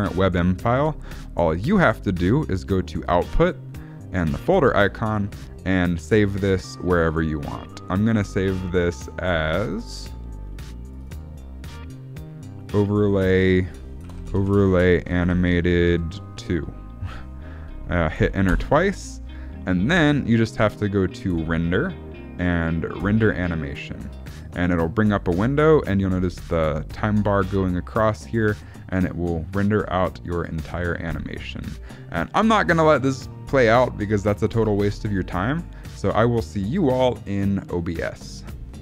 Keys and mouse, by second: 4.2 click, 21.3-23.3 drag.